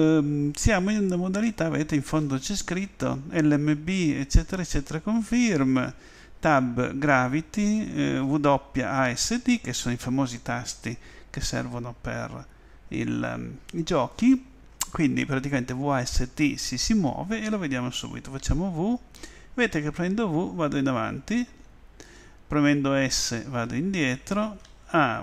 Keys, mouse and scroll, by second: 18.9 w, 19.8 w, 22.7 w, 24.6 s.